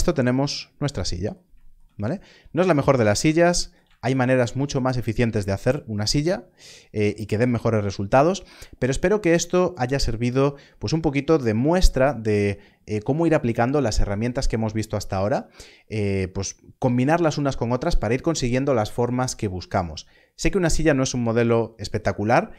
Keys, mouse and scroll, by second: 2.0 scroll up 1.